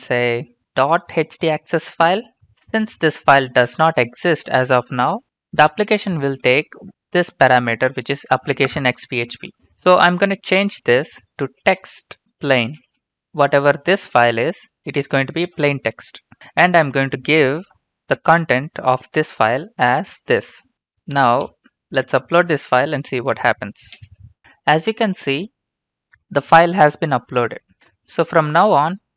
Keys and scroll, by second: 11.2-13.4 typing, 20.1 ctrl+v, 23.9 ctrl+space.